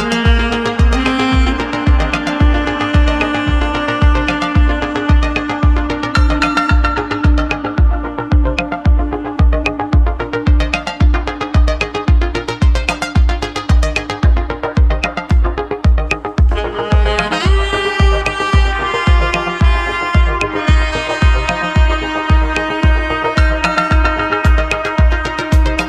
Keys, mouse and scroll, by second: 1.9 shift+click, 2.4-4.6 middle drag, 4.6 shift+click, 5.1 middle click, 5.8 shift+click, 6.2-7.3 middle drag, 7.3 shift+click, 7.7-9.2 middle drag, 9.2 shift+click, 9.6-11.0 middle drag, 11.0 s, 14.5 click, 16.1 s, 20.9-23.4 middle drag.